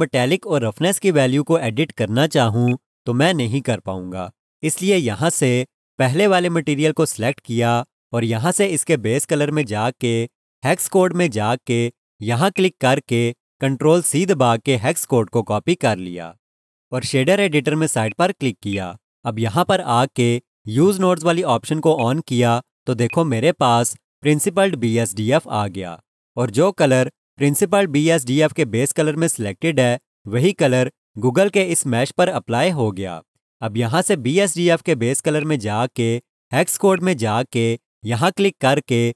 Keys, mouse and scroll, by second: 1.6 alt+shift+click, 2.6 alt+click, 7.2 click, 14.0 ctrl+c, 14.1 typing, 18.0 click, 21.9 click, 23.1 alt+shift+click, 35.4 click.